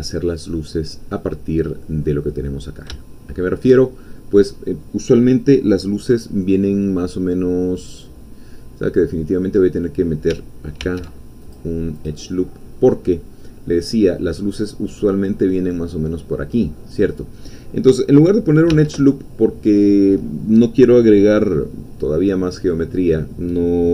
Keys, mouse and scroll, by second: 2.3 click, 2.4-4.0 middle drag, 4.0 shift+scroll up 2, 8.2 scroll down 2, 9.2-9.8 scroll up 2, 9.8-10.3 scroll up 1, 10.8 ctrl+r, 11.4 ctrl+click, 13.4 scroll up 2, 18.7 k.